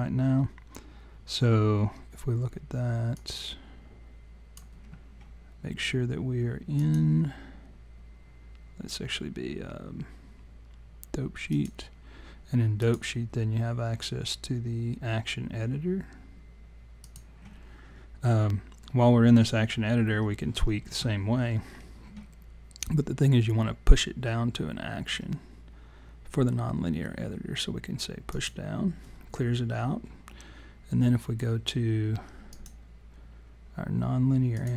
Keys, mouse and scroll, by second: 3.1 click, 6.7 click, 12.8 click, 28.3 click, 32.5 click.